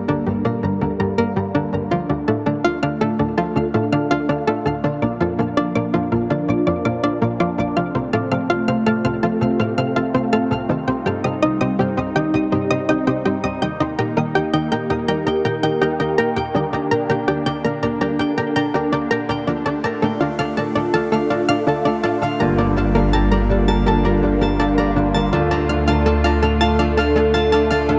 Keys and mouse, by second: 5.2 drag, 5.2 right drag, 6.0 shift+middle drag, 6.5 middle drag, 7.2-7.8 middle drag, 7.9-8.7 shift+middle drag, 9.7 s, 13.4-13.9 drag, 13.4-13.9 middle drag, 13.4-13.9 right drag, 14.1 shift+drag, 14.1 shift+middle drag, 14.1 shift+right drag, 14.5-15.2 drag, 14.5-15.2 middle drag, 14.5-15.2 right drag, 16.6 click, 18.3 s, 20.6 g, 22.5-23.2 drag, 22.5-23.2 right drag, 23.9 shift+drag, 23.9 shift+right drag, 24.5-24.8 middle drag, 25.0 shift+middle click, 27.1 shift+d.